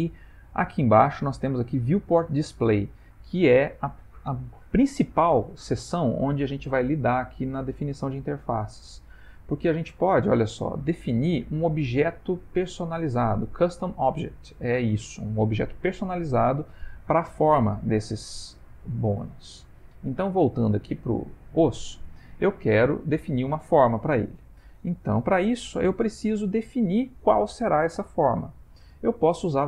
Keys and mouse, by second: 1.2 click, 2.4 middle click, 21.5 click, 24.9 shift+middle click, 25.6 ctrl+middle click, 26.8 shift+middle click.